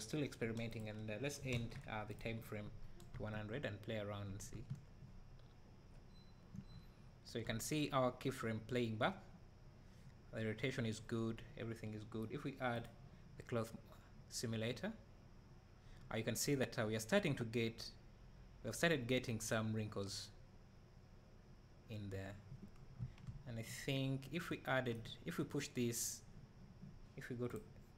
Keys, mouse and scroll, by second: 3.2 space, 12.9 click, 23.9 Escape, 24.5-27.9 right drag.